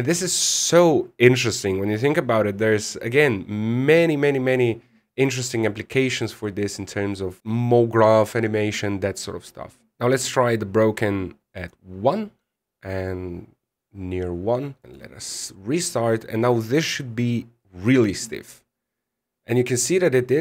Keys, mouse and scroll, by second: 3.5 middle click, 6.4 middle click, 7.4 click, 7.4-7.7 scroll down 13, 9.8 click, 13.1 click, 14.8-15.5 scroll up 5, 15.5 click.